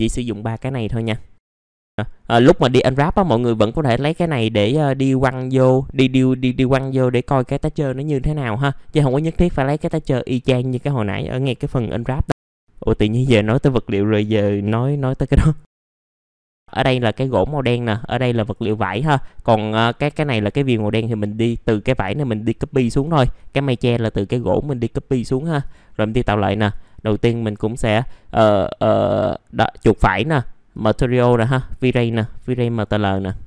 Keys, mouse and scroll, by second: 15.9 m, 16.3 middle click, 16.4 scroll down 1, 16.6 click, 17.3 middle click, 17.9-21.1 drag, 25.1 middle click, 25.6 click, 25.8-26.2 scroll up 1, 26.2 right click, 29.1-33.4 drag.